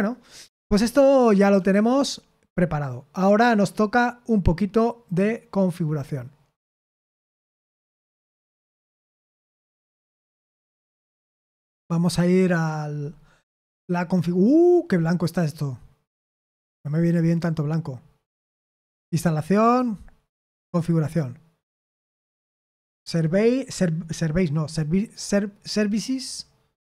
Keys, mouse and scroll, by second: 0.5-1.7 scroll down 2, 1.7-7.8 scroll down 1, 7.9 click, 20.6 click.